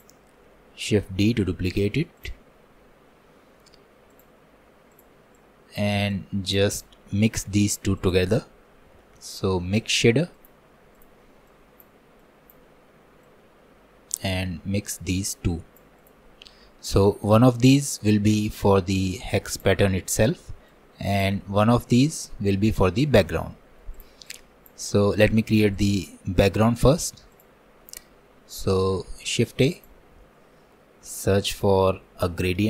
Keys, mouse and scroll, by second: 0.9 shift+d, 3.0 click, 4.1-11.6 drag, 12.2-18.5 drag, 26.4-32.6 middle drag.